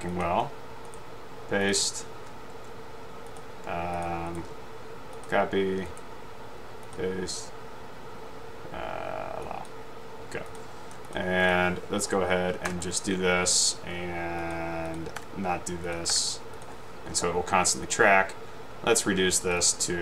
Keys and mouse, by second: 0.2 click, 0.9 right click, 1.7 click, 4.4 right click, 5.3-5.9 drag, 9.8-10.3 drag, 11.5 click, 15.3 Delete, 17.9 click, 19.7-20.0 drag.